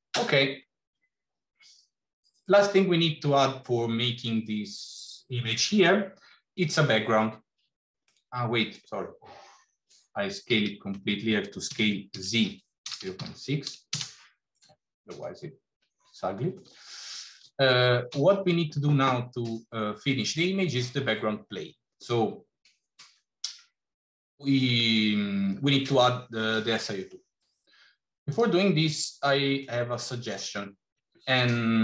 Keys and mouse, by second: 1.6-2.4 middle drag, 8.2 middle click, 10.5 ctrl+z, 11.5 s, 14.6-16.5 middle drag, 28.3 drag, 28.9 middle click.